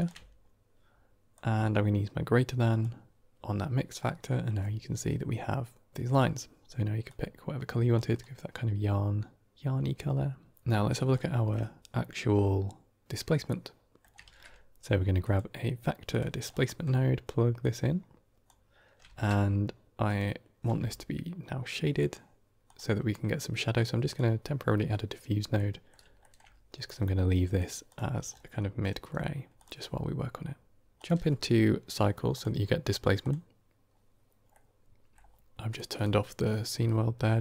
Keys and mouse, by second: 1.2-2.7 drag, 6.0 click, 11.0 shift+middle click, 13.4 middle click, 14.1 shift+a, 16.6 middle click, 17.5-18.3 drag, 18.9 shift+a, 23.6-24.1 drag, 25.4-25.8 middle drag, 26.1 shift+middle drag, 27.4 click, 31.1 click, 32.2-33.9 drag, 34.4-35.0 middle drag, 35.6 click, 35.8-36.7 drag.